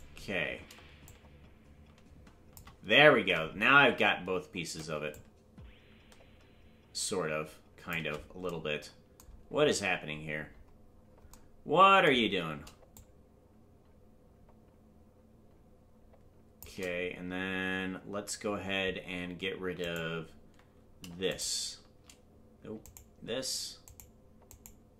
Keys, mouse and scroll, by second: 1.0-2.5 shift+drag, 3.1 ctrl+z, 5.1-7.9 shift+drag, 9.4-10.0 scroll up 1, 10.0 scroll down 1, 10.1-11.3 scroll down 1, 11.3 scroll down 3, 12.9-16.6 shift+drag, 19.8 right click, 21.3-24.8 shift+right drag.